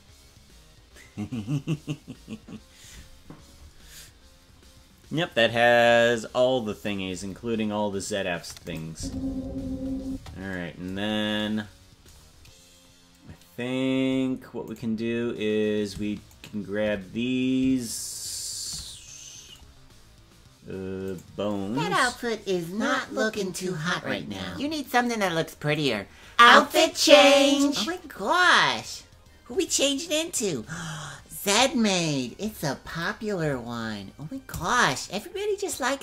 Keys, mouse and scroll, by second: 8.6 click, 8.9 space, 10.0 space, 11.0 scroll down 2, 14.0-14.3 scroll down 2, 14.8 right click, 16.4 shift+right click, 19.7-20.3 scroll down 2, 20.8-21.2 scroll down 1, 21.2 right click, 23.4-25.3 drag, 25.9 right click, 27.0-29.0 drag.